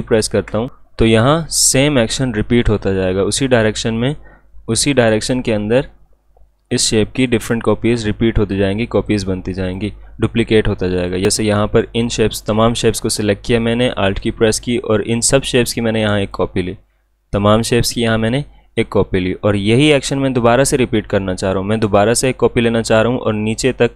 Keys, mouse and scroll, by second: 8.0-14.2 drag, 14.2-19.2 alt+drag.